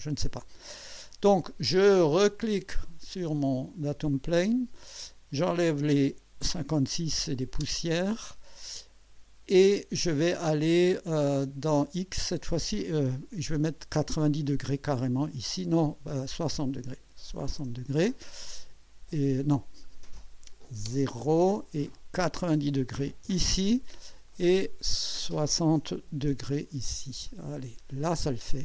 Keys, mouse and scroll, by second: 2.3 click, 3.9-4.6 drag, 5.5 click, 7.6 0, 10.8 scroll down 2, 11.9 scroll up 2, 13.3 KP_9, 13.5 KP_0, 16.3 click, 17.4 KP_6, 17.6 KP_0, 19.8 click, 20.8 KP_0, 21.9 click, 22.8-23.7 typing, 24.3 click, 25.9 6, 26.3 0, 27.2 click, 28.4-28.6 drag.